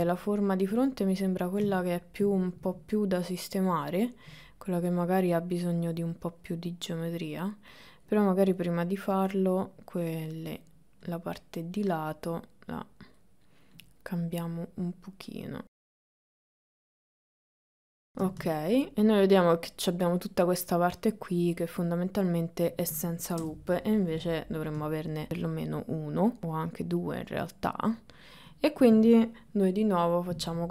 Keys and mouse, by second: 0.2 shift+middle click, 1.8 shift+middle click, 2.9-4.3 ctrl+middle drag, 8.5 click, 9.2-10.6 drag, 11.8-13.2 drag, 14.5-15.9 drag, 16.0 click, 16.2 click, 16.7 ctrl+shift+middle click, 18.1 ctrl+middle click, 21.6-22.8 middle drag, 23.4 KP_1, 25.2-26.4 shift+middle drag, 29.8 ctrl+r.